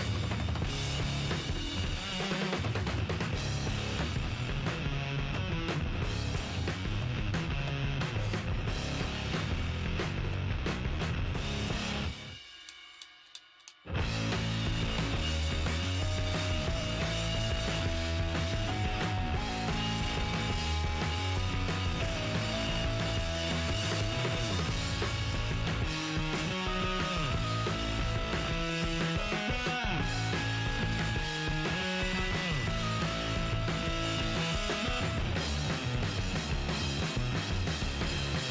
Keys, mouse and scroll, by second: 0.1-1.3 right drag, 0.8 g, 2.2-4.1 middle drag, 3.3 Tab, 6.2 KP_1, 6.6-7.2 scroll up 1, 7.2-9.1 middle drag, 9.7-11.2 middle drag, 11.5-14.6 right drag, 11.7 Tab, 14.6-25.8 middle drag, 23.5-25.3 right drag, 25.5 ctrl+Tab, 26.1-28.1 right drag, 27.8 ctrl+e, 29.7 middle click, 30.1 ctrl+Tab, 30.8-33.1 right drag, 31.5 f, 32.0 ctrl+Tab, 33.1-34.8 right drag, 33.1-37.2 middle drag, 36.1 g, 37.6 middle click, 38.0-38.5 right drag.